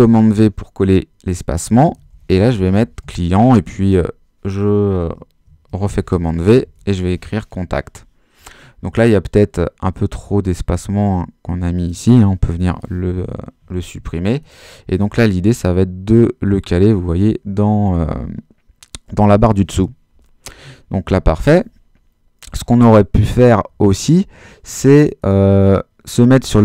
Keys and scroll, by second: 1.6-3.5 typing, 3.6 super+s, 3.9 super+v, 5.5-7.6 typing, 12.5 BackSpace.